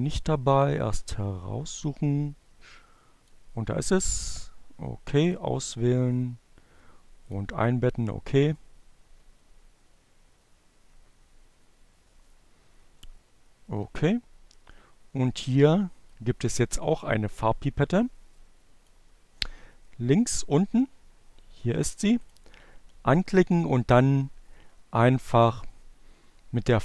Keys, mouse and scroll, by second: 3.7 click, 4.3 click, 7.1 click, 19.5-24.2 drag.